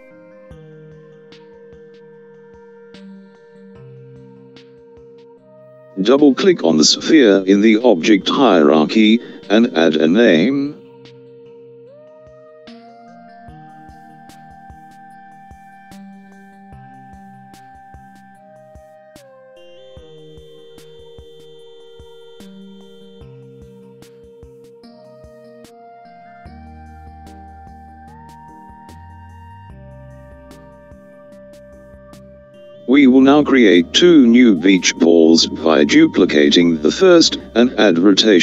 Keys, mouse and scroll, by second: 11.3 click, 13.8 click, 14.1-17.9 drag, 31.5 l, 38.2 click.